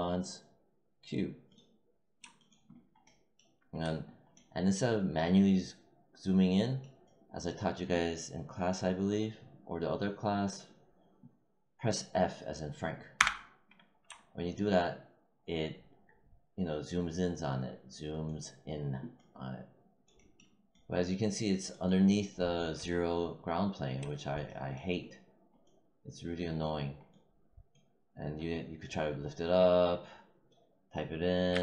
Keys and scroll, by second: 13.1 f, 31.5 z.